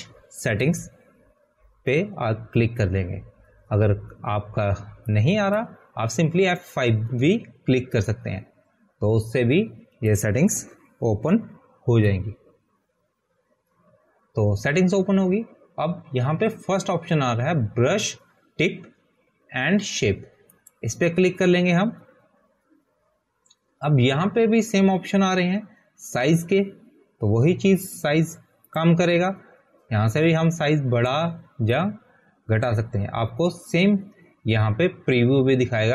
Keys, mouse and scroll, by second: 8.7 click, 12.5 click, 14.2 F5, 23.0 click, 24.1 click, 34.3 click.